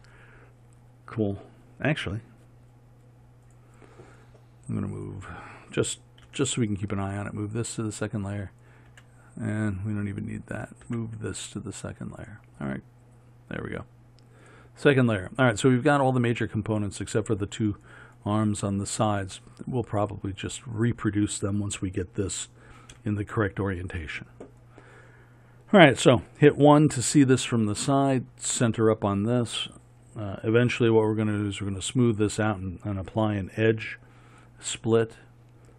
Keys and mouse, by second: 6.3 m, 23.0 KP_1.